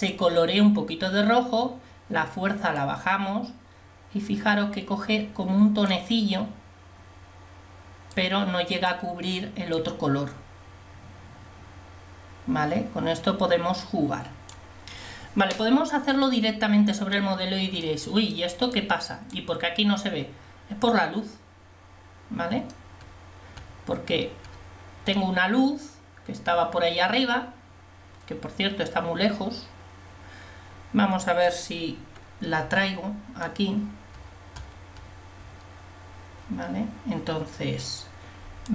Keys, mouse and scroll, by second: 16.3-18.1 middle drag, 18.8-20.1 drag, 32.1 KP_1, 32.7 KP_5.